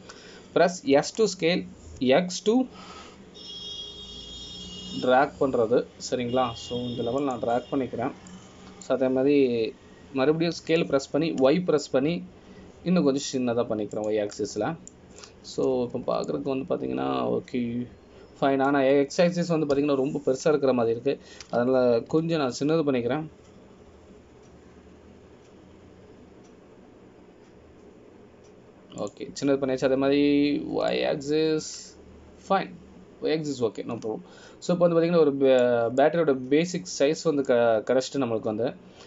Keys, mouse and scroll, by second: 10.1 scroll down 2, 10.5 middle click, 12.8 s, 16.5 middle click, 18.1 scroll up 2, 18.4 middle click, 21.9 KP_7, 23.6 s, 33.1 middle click, 38.2 middle click.